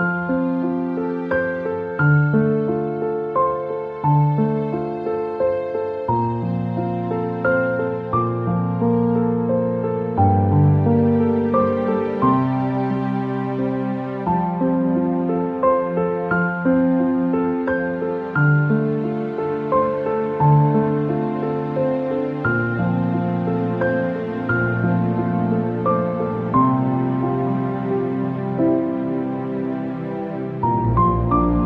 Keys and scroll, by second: 18.1 Return.